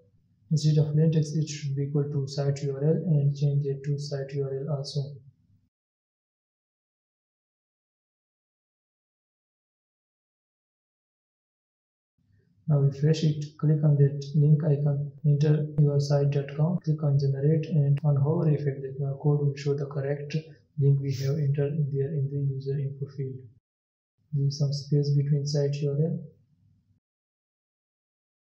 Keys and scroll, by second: 10.9 ctrl+s, 26.5 ctrl+s.